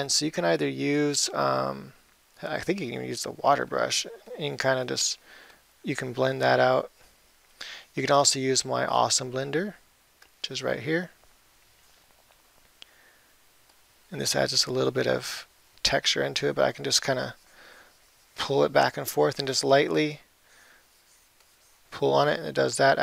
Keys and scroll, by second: 12.7 [, 19.8 ].